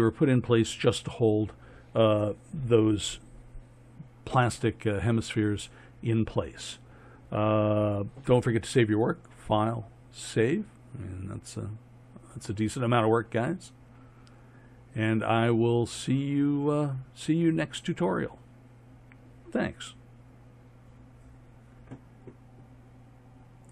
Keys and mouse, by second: 9.3-21.1 drag.